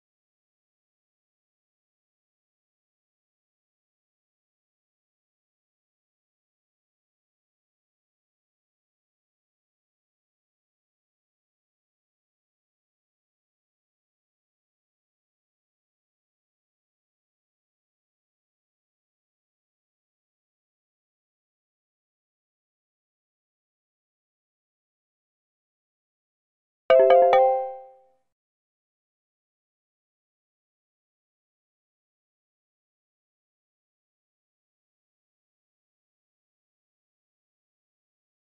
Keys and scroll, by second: 0.0-0.4 typing.